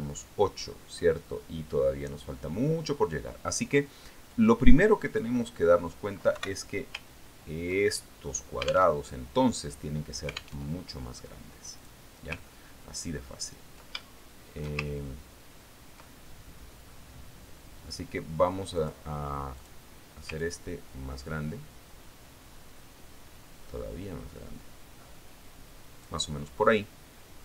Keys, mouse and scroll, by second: 0.3-1.3 ctrl+scroll down 4, 1.7-3.7 ctrl+drag, 5.8 click, 7.8 Delete, 8.9 ctrl+scroll down 2, 9.7-10.8 middle drag, 12.1 alt+Tab, 13.3 click, 14.0-14.3 ctrl+scroll up 2, 14.8 ctrl+scroll up 2, 14.9 ctrl+scroll down 2, 15.5 ctrl+shift+middle click, 16.2 ctrl+shift+scroll up 1, 16.4-17.0 ctrl+shift+scroll down 1, 17.0 ctrl+scroll up 1, 17.2-17.5 ctrl+scroll down 1, 17.5-18.6 ctrl+middle drag, 20.3 click, 21.1 click, 21.9-27.4 ctrl+drag.